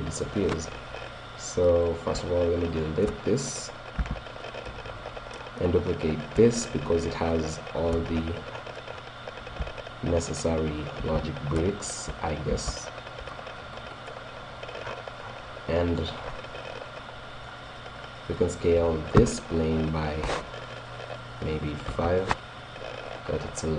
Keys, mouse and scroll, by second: 1.9-4.5 right drag, 4.0 x, 4.6 click, 5.1 middle click, 6.0 middle click, 6.2 right click, 6.3-7.6 drag, 8.2-10.7 shift+middle drag, 11.1 shift+d, 12.7 shift+d, 15.8-18.9 middle drag, 17.8 right click, 19.0 click, 19.2 s, 19.3 right click, 19.5 right click, 23.3-23.7 drag.